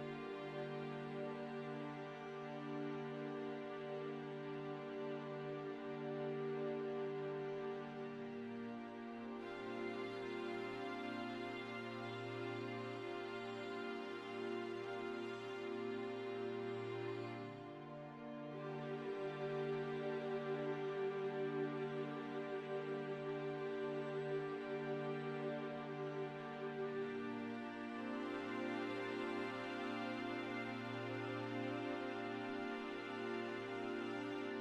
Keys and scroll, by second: 3.8 e, 4.8 Tab, 5.4 e, 6.6 ctrl+KP_3, 7.6 shift+z, 10.1 a, 10.9 s, 15.4 1, 19.0 shift+z, 19.9 Tab, 22.5 Tab, 23.2 3, 24.6 shift+d, 25.4 p, 26.1 Tab, 27.0 KP_7, 27.5 shift+z, 28.0 Tab, 28.7 a, 30.2 s, 34.4 s.